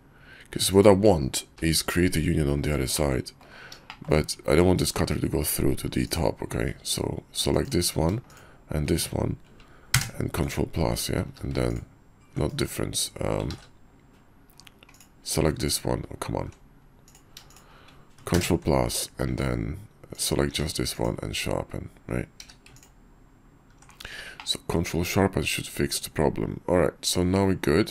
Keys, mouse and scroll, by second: 1.5 g, 3.1 click, 3.9 shift+click, 10.0 ctrl+KP_Add, 11.2 q, 14.2 ctrl+z, 14.9 click, 15.4 q, 17.0 click, 17.5 shift+click, 18.5 ctrl+KP_Add, 19.3 q, 20.5 q, 22.4 q, 24.4-24.7 drag, 24.7-25.3 middle drag, 25.3-25.8 drag, 25.8-27.9 middle drag.